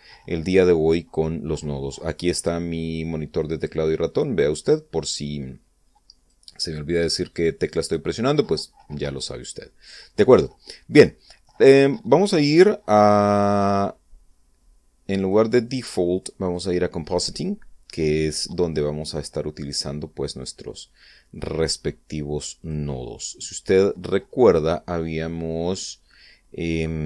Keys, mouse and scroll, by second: 3.9 click, 4.6 click, 7.4 click, 9.6 middle click, 11.0-12.1 middle drag, 15.7 click, 16.9 click, 20.2 click, 23.1 click, 24.4-25.6 middle drag.